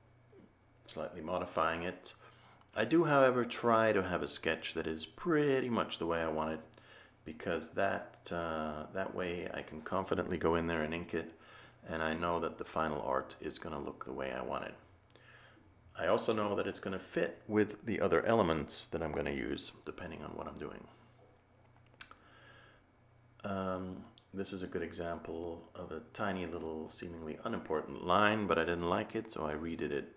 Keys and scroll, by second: 8.9 a.